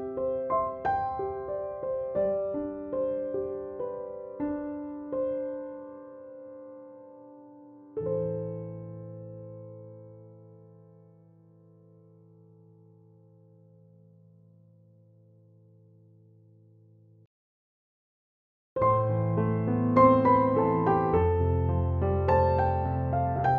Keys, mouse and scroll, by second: 0.1-1.1 click, 1.9-2.2 ctrl+alt+click, 5.0 Down, 9.7 Up, 11.0 click, 14.6 alt+click, 15.7 ctrl+=, 16.1-17.3 [, 17.7 [, 18.5-18.8 click, 19.1-20.3 typing, 19.5 click, 20.6 click.